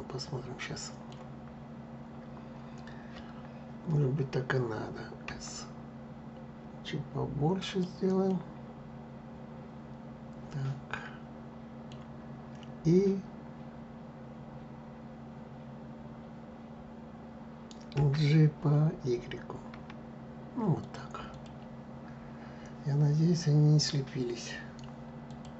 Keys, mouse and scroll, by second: 1.1-2.7 scroll up 4, 5.0 s, 8.0-11.0 middle drag, 17.7 g, 21.0 click, 25.0 click, 25.5 click.